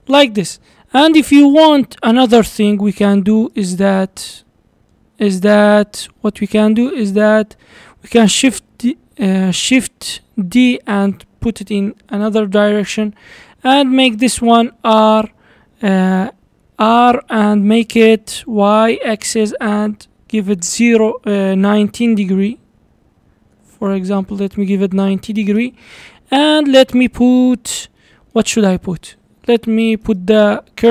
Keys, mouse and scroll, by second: 1.5 click, 2.0-2.6 scroll down 2, 2.6-3.9 shift+right drag, 4.5 shift+middle click, 4.5 shift+right click, 4.5-6.0 shift+middle drag, 6.0 shift+c, 7.3 shift+middle click, 8.2 shift+d, 12.7-13.2 scroll down 2, 13.2 scroll down 1, 13.5-13.9 scroll up 2, 13.9-14.3 shift+middle drag, 14.3 shift+scroll up 1, 14.7 r, 26.0 scroll down 1, 26.3-27.3 middle drag, 27.3-27.9 scroll up 2, 27.9 scroll up 1, 28.0-30.1 middle drag, 30.1 shift+right click, 30.8 shift+a.